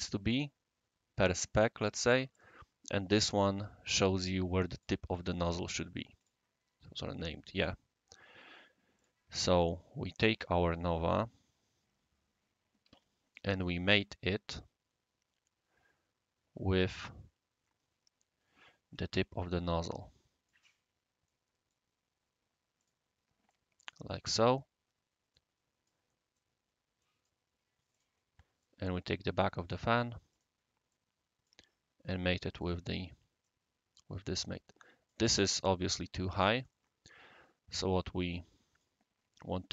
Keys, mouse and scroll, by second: 2.3 click, 3.3 click, 4.7 click, 6.2 click, 8.9 click, 9.4 right click, 10.5 scroll down 1, 10.6-10.9 scroll up 1, 10.9 scroll down 1, 11.0 scroll up 2, 11.3 scroll down 1, 11.6-12.4 scroll up 4, 12.4 scroll down 1, 12.4 scroll up 1, 12.4 scroll down 1, 12.5-13.3 scroll up 3, 13.0 m, 13.6 scroll down 1, 13.6-15.2 scroll up 2, 15.2-15.6 scroll up 1, 15.6 scroll down 1, 15.6 scroll up 1, 15.7 scroll down 1, 16.9 click, 17.9 scroll down 1, 18.2 scroll up 1, 18.4-18.8 scroll down 2, 19.2-19.6 scroll down 2, 19.6 scroll up 1, 19.8 right click, 20.6 scroll down 1, 20.7 scroll up 1, 21.0 scroll down 1, 21.3-21.7 middle drag, 22.8 click, 23.2 click, 23.5 right click, 24.1 scroll down 1, 24.1 scroll up 1, 24.2 scroll down 1, 24.8 scroll down 1, 25.5 middle click, 26.6-26.9 scroll down 1, 26.6 typing, 26.9 middle click, 27.0 right click, 27.9 click, 28.6-29.7 right drag, 30.3 click, 32.6 click, 33.4-35.1 right drag, 36.5 click, 38.3 click.